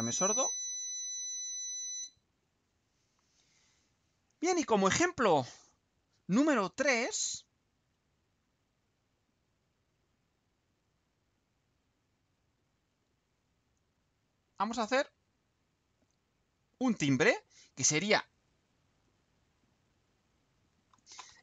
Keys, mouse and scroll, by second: 6.0 click, 12.3 click, 14.2-15.3 drag, 15.4 click, 16.5 click, 17.6-18.6 right drag, 19.0-20.8 right drag.